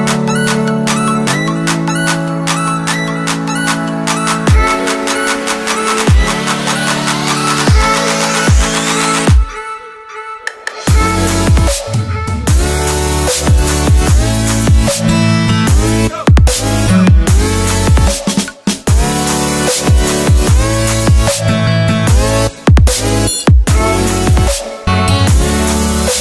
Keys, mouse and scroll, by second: 3.3 Return, 6.0 Down, 9.4 click, 12.6 alt+Tab, 14.2 click, 18.8 Return, 19.7 scroll down 1, 22.0 right click, 23.7 click.